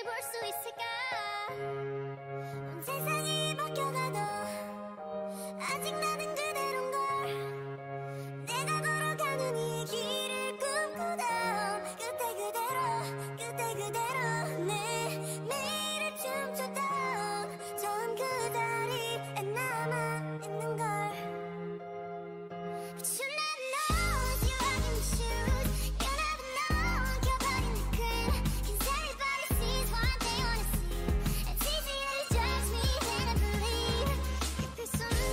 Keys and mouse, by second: 1.1 ctrl+r, 3.0 click, 3.5 ctrl+r, 6.5 ctrl+r, 9.0 ctrl+r, 9.7 a, 9.9 a, 10.7-12.5 drag, 12.5-16.5 middle drag, 16.5 right click, 16.9-18.6 drag, 17.5 w, 18.9 w, 20.7 w, 21.1 w, 22.0 Tab, 23.5 Tab, 25.1 w, 25.5 click, 25.5 w, 25.7 w, 26.1 Tab, 27.6 ctrl+z, 27.8 ctrl+z, 27.9 ctrl+z, 29.0 ctrl+shift+z, 29.4 ctrl+shift+z, 30.6 Tab, 31.4 Tab, 31.9-33.0 drag, 32.1 g, 33.0 o, 33.3 click, 33.3 g, 35.2 g.